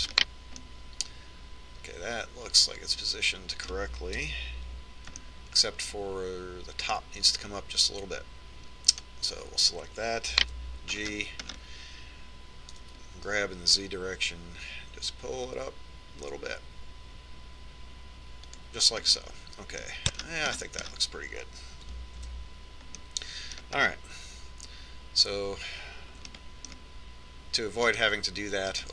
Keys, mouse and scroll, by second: 0.1 right click, 0.5 KP_Decimal, 5.6 KP_1, 6.6-8.5 middle drag, 10.3 right click, 11.8 g, 20.6-23.8 middle drag, 23.8 Tab, 24.5 middle click, 27.3 middle click, 27.8-28.9 middle drag.